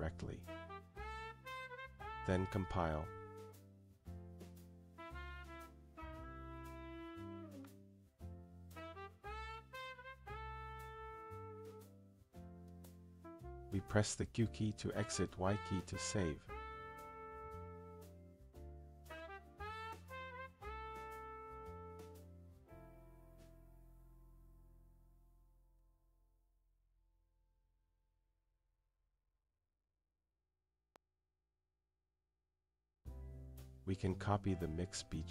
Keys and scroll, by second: 17.5 q, 21.5 y.